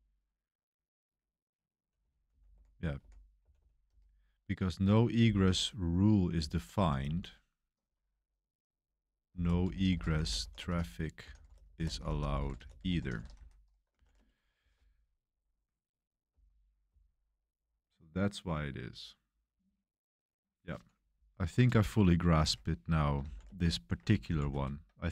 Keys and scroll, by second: 0.0-5.2 typing, 4.8 Escape, 6.3-7.3 typing, 9.0-17.6 typing, 21.6-25.1 typing, 22.4 Escape.